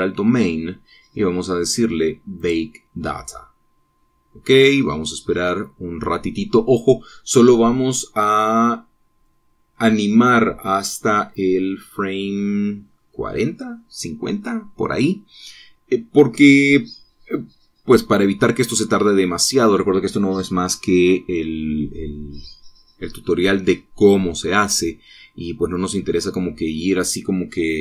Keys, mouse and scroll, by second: 0.2 click, 3.4 click.